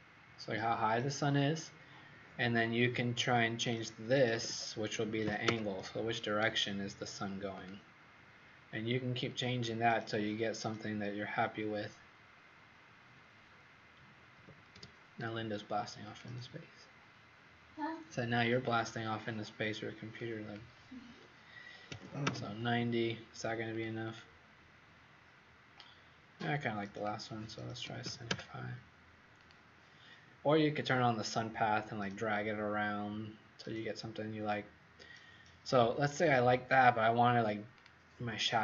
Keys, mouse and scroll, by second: 3.3 click, 4.3 KP_5, 4.7 KP_0, 5.4 KP_Enter, 7.5 click, 14.3 KP_6, 14.7 KP_Enter, 14.7 KP_0, 16.0 click, 21.8 KP_9, 21.9 KP_0, 22.2 KP_Enter, 24.0 click, 27.8 KP_7, 28.0 KP_5, 28.2 KP_Enter, 29.3 click.